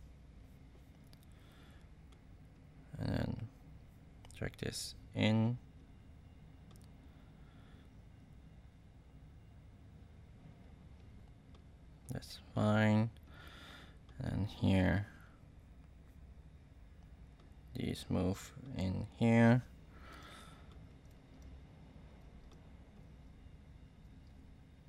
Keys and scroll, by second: 21.1 space.